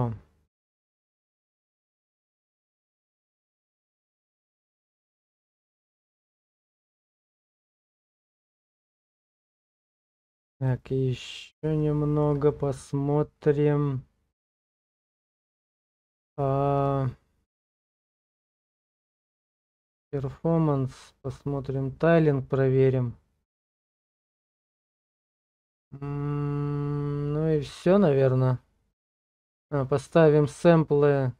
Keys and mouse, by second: 3.2 click, 6.3 Tab, 10.7 click, 11.8 shift+click, 16.8 click, 18.6 click, 19.6 click.